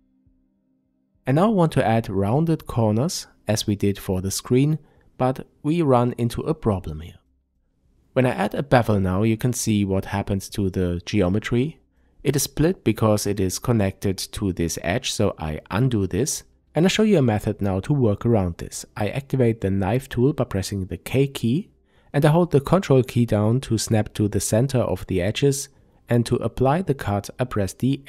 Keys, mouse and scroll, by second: 0.5 shift+middle click, 0.9-2.0 scroll up 1, 2.0 click, 3.9 click, 4.3-5.3 scroll up 1, 5.3 click, 6.4 ctrl+b, 9.1 click, 9.4-12.1 scroll up 1, 12.1 ctrl+z, 13.1-28.0 shift+middle drag, 17.2 k, 19.1-23.1 scroll up 1, 24.3 Return, 26.2 k.